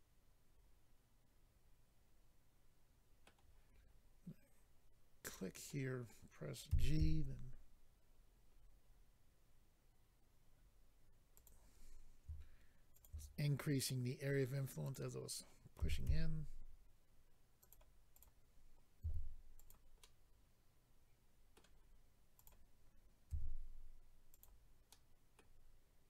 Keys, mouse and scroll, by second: 5.2 click, 5.3 click, 5.7 middle click, 6.7-7.3 typing, 8.2-8.7 scroll down 5, 10.5-11.0 scroll down 2, 11.4 click, 12.9 shift+click, 14.8 click, 14.9 click, 15.8-16.3 typing, 17.6 click, 17.7 click, 18.1 click, 18.2 click, 19.4 click, 19.6 click, 19.6 g, 19.7 click, 20.0 middle click, 22.4 click, 23.3 g, 24.3 click, 24.4 click, 24.9 middle click.